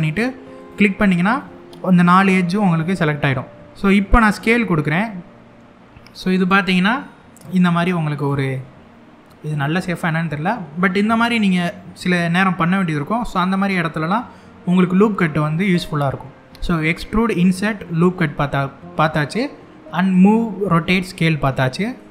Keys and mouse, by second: 1.0-3.5 middle drag, 4.0 s, 6.1 click, 6.4 middle click, 7.8 click, 8.2-9.3 middle drag, 9.8 middle click, 13.1 middle click, 17.0 middle click, 21.6 middle click.